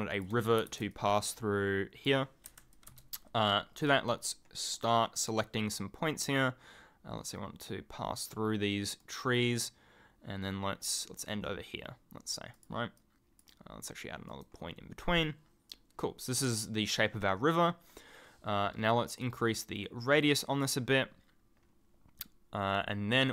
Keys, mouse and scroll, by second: 2.7 alt+click, 4.7 right click, 8.1 right click, 9.0 right click, 11.2 right click, 12.5 click, 14.3 right click, 19.2 click.